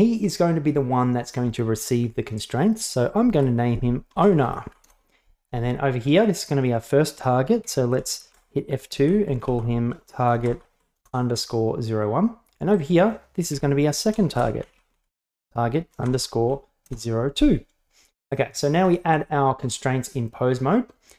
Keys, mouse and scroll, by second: 3.4 F2, 6.1 right click, 7.7 F2, 12.8 right click, 13.6 F2, 18.3 right click, 18.9 Tab.